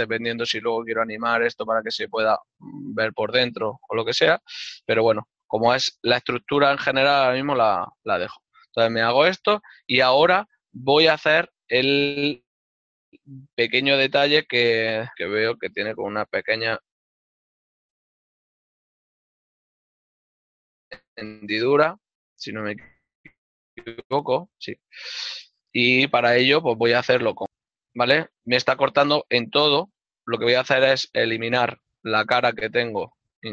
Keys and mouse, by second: 3.5 middle click, 5.8 l, 6.3 middle click, 8.2 ctrl+middle click, 14.1 shift+middle click, 22.2 alt+click, 28.0 ctrl+r, 28.5 click, 30.7 right click, 30.7 ctrl+z, 30.9 ctrl+Tab, 31.0 click, 31.5 middle click, 33.3 z.